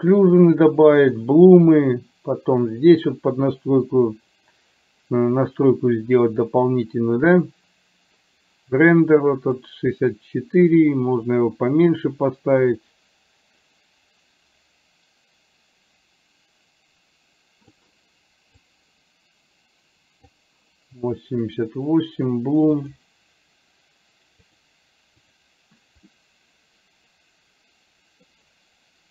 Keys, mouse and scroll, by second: 9.8-17.9 drag, 19.0-20.8 drag, 24.6 click, 26.3-28.4 middle drag.